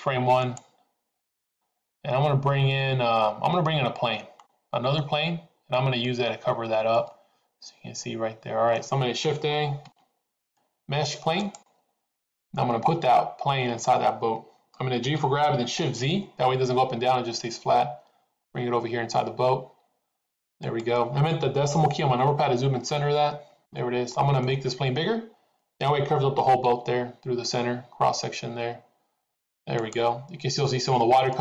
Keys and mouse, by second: 0.4 click, 1.6-5.1 middle drag, 6.9-8.8 middle drag, 9.8 shift+a, 14.9 g, 22.8 KP_Decimal, 24.2 middle click, 26.5 s, 31.3-31.4 middle drag.